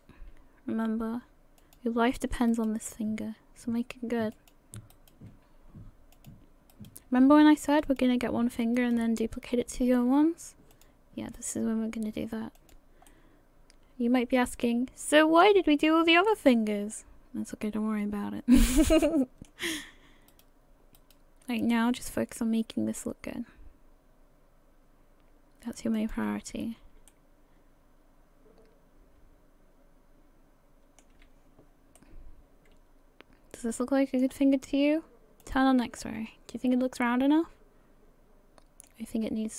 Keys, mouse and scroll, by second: 2.5 right click, 2.9 g, 4.9 right click, 5.3 g, 6.7 right click, 7.1 g, 8.8 right click, 10.0 g, 11.4 right click, 11.6 g, 13.3 middle click, 16.3 middle click, 18.6 middle click, 20.3 right click, 21.0 right click, 21.4 g, 26.4 a, 26.6 a, 27.1 middle click, 32.0 middle click, 35.4 click, 36.0 middle click, 39.2-39.5 scroll up 2.